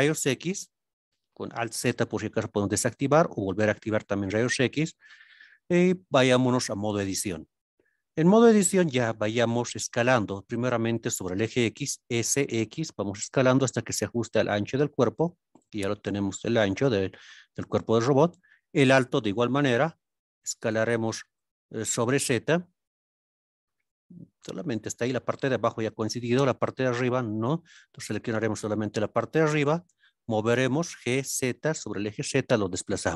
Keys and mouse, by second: 1.8 alt+z, 6.9 Tab, 12.4 x, 15.2 click, 22.1 z, 23.9 click, 27.9 click, 30.9 z, 32.4 click.